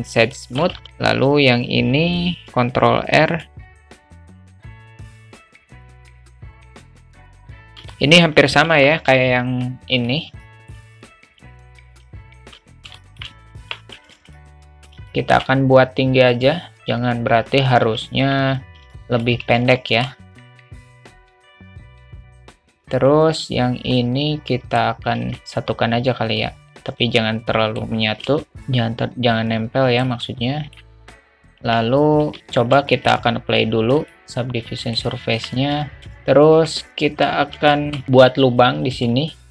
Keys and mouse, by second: 0.4 shift+middle click, 0.7 Tab, 2.4 ctrl+r, 3.6 ctrl+r, 4.0 ctrl+r, 5.0 ctrl+alt+r, 5.1 alt+middle click, 6.0 ctrl+r, 6.6 alt+middle click, 7.0 ctrl+r, 7.9 alt+middle click, 8.7 Tab, 10.0 click, 10.4-10.7 alt+middle drag, 13.0 alt+shift+middle click, 13.6 Tab, 14.1 alt+z, 14.3 click, 15.1 shift+middle click, 16.3 click, 16.8 ctrl+z, 17.8 a, 18.2 a, 18.9 alt+middle click, 19.5 `, 20.5 s, 21.7 s, 22.4 click, 22.7 alt+z, 24.0 alt+middle click, 25.1 alt+z, 25.3 click, 25.4 alt+z, 26.4-27.8 drag, 28.4 shift+middle click, 28.6-30.1 drag, 30.2 middle click, 30.6 alt+click, 30.7 middle click, 31.6 Tab, 32.9 shift+middle click, 34.0-35.0 drag, 35.3 Tab, 35.8 alt+middle click, 36.0 `, 36.5 a, 37.7 alt+shift+middle click, 38.1 alt+z, 38.9 3.